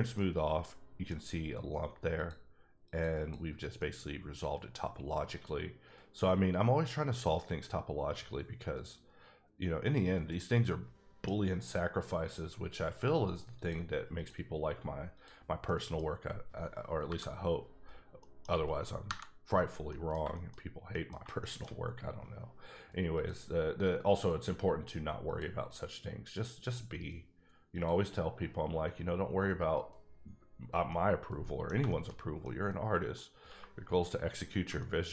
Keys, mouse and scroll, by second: 0.1 middle click, 2.1 click, 2.9 click, 3.2 double click, 3.8 middle click, 13.5 click, 14.1 click, 15.1 click, 15.6 middle click, 17.8 scroll down 3, 18.2 middle click, 19.0 KP_Divide, 19.9 middle click, 20.2 shift+middle click, 20.5 shift+scroll up 2, 20.9 middle click, 21.2 shift+middle click, 21.9-23.1 scroll up 3, 23.1 click, 24.0 click, 27.6 click, 27.7 click, 30.9 middle click, 31.7 shift+middle click, 32.2 scroll up 1, 32.4 middle click, 33.3 scroll down 1, 34.2 scroll up 1, 34.8 middle click.